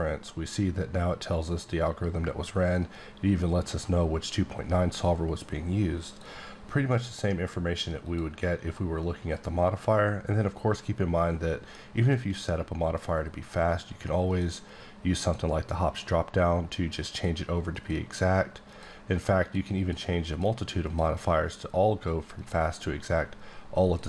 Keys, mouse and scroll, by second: 6.0 click, 6.1 click, 6.8 click, 8.0 click, 14.2 click, 15.1 click, 17.1 click, 17.6 click, 18.7 click, 19.3 click, 20.2 click, 20.8 click, 21.4 click, 22.3 click, 23.7 click.